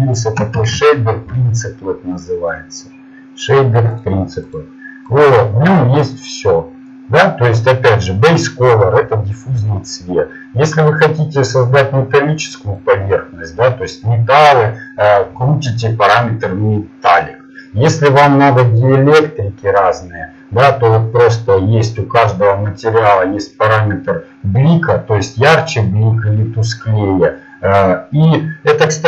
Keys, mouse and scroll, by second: 0.6 shift+a, 6.1 click, 6.4-11.9 drag, 22.8 click.